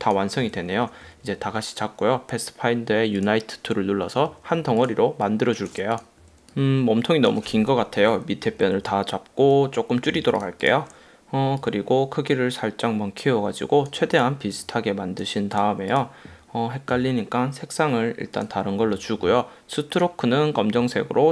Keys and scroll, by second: 6.4 a, 8.2 Up, 10.3 v.